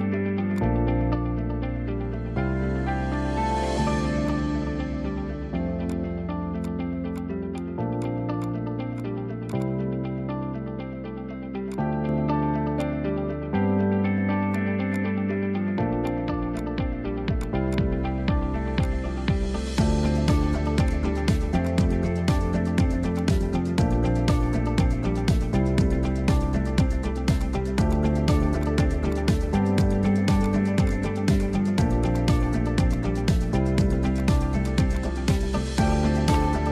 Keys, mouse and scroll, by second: 0.0 click, 2.1 0, 3.4-4.3 scroll down 7, 4.3-5.9 drag, 6.7 click, 9.6 drag, 10.6 a, 11.1 s, 12.1 g, 13.3 scroll up 4, 13.7 Tab, 15.0 click, 16.6-18.1 drag, 18.1-18.6 scroll down 2, 19.8-20.9 drag, 22.3 ctrl+i, 22.7 h, 23.1 click, 23.5-23.9 shift+middle drag, 23.9-24.4 scroll up 2, 24.4 Tab, 25.6 a, 27.4-29.8 drag, 32.2 click, 33.0 click, 34.7 shift+click, 35.0 shift+click, 36.0 shift+click, 36.1 middle click.